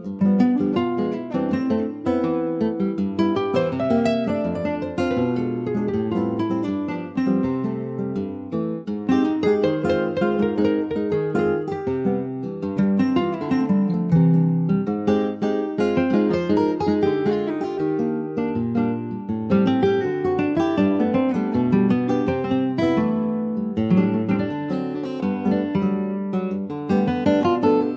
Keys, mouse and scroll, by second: 0.3 alt+middle click, 1.6 click, 2.9 ctrl+s, 3.4 alt+middle click, 4.1-4.4 scroll up 1, 4.4 shift+click, 5.3 /, 5.7 click, 6.1-6.4 scroll up 2, 6.4 click, 6.7 shift+middle click, 7.3 ctrl+s, 8.0 click, 10.5 shift+middle click, 10.8-11.3 scroll down 1, 11.3 s, 13.8 s, 16.4-16.7 scroll down 1, 16.7 s, 21.0 scroll up 2, 21.4 shift+middle click, 22.0 click, 24.5 click, 27.4 click.